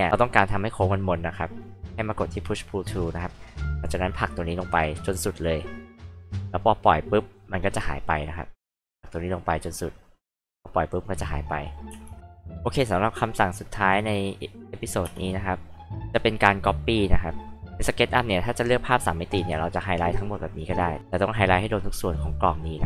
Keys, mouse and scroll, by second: 2.8-6.1 drag, 8.7-10.6 drag, 11.9 space, 13.4 click, 15.0 space, 19.3-20.1 drag, 20.5 click, 20.9-22.1 drag.